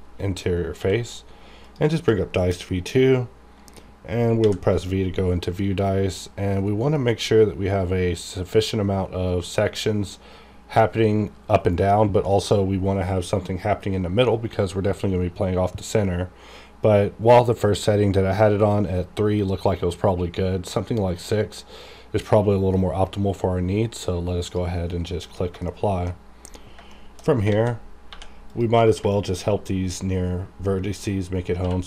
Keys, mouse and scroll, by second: 0.0-0.8 scroll down 1, 0.8 q, 1.6 click, 4.4 v, 4.9-6.0 scroll down 1, 6.0 scroll up 1, 6.3-6.7 scroll down 1, 7.2-9.0 scroll up 1, 16.1 scroll up 1, 24.4 click, 25.7 shift+middle click, 26.1-26.7 shift+scroll up 2, 26.9 shift+middle click, 27.5 alt+a, 28.1 1, 28.5 click, 29.1 shift+middle click, 29.4-31.3 shift+scroll up 1, 31.3-31.6 scroll up 1, 31.6 q.